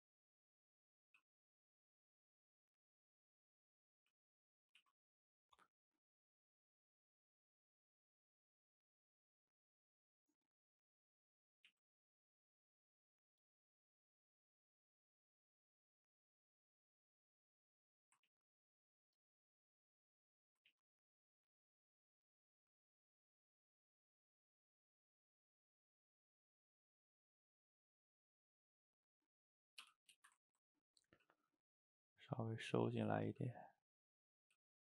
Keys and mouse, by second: 1.1 f, 1.5 middle click, 1.8-3.0 drag, 3.0-4.2 middle drag, 4.2 ctrl+z, 4.8 ctrl+shift+z, 5.1 middle click, 5.7 click, 6.1 middle click, 6.7 click, 6.9 middle click, 7.3 click, 7.6-8.7 middle drag, 8.7 click, 9.0-10.5 middle drag, 10.5 click, 11.1 middle click, 11.7 ctrl+z, 12.1-14.0 drag, 14.0 middle click, 14.9-18.1 drag, 18.1 middle click, 18.3 ctrl+z, 18.5 ctrl+z, 18.8-20.2 drag, 20.2 middle click, 20.8 ctrl+z, 21.1 click, 21.9-24.6 middle drag, 24.6-26.5 drag, 26.5-28.3 middle drag, 28.3-29.5 drag, 29.5 middle click, 29.9 g, 30.3 ctrl+shift+middle click, 31.2 f, 31.5 middle click, 32.0-33.4 drag, 33.4 f, 34.1 click, 34.5 f.